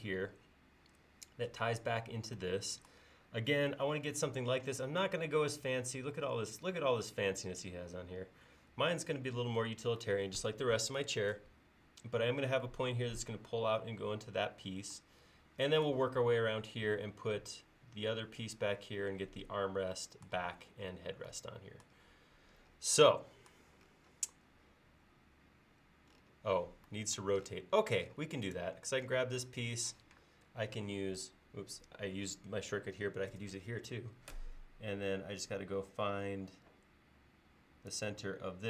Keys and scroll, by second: 30.0 q, 33.4 q.